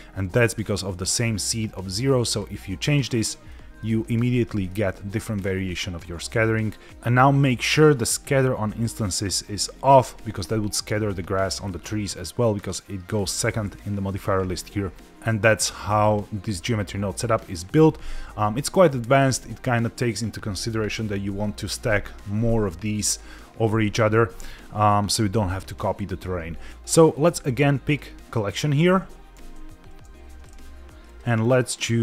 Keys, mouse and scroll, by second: 0.4 middle click, 2.2 click, 3.4 middle click, 4.2-4.5 scroll up 1, 4.5 middle click, 26.8-27.9 scroll down 2, 27.9 click, 29.8 ctrl+s, 31.1-32.0 drag.